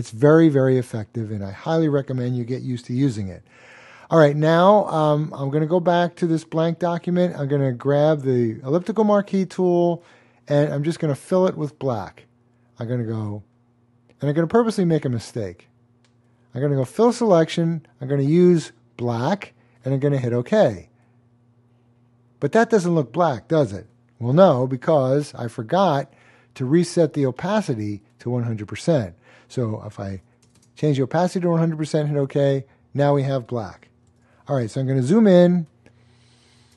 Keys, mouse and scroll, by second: 5.3 click, 11.6 click, 18.1 click, 21.3 double click, 24.9 click, 30.1-30.4 typing, 32.2 click, 32.2 typing, 34.1 super+d, 35.0 super+space, 35.5 space, 35.6 click, 35.6 space, 35.7 space.